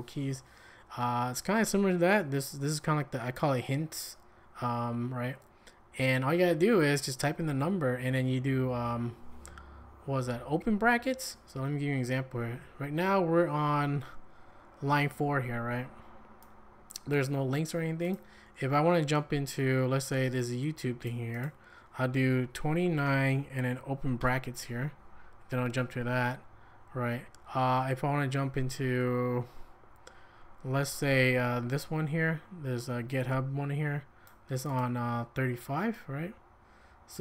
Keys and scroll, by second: 14.5 j, 22.6-24.2 typing.